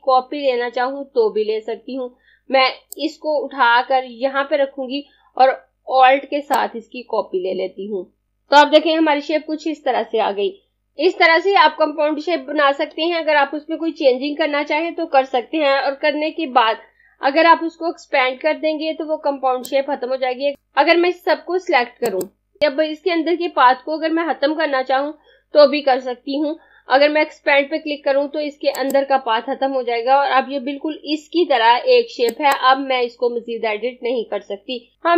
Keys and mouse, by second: 3.0 click, 8.3 click, 19.5 click, 28.7 click, 32.1 click.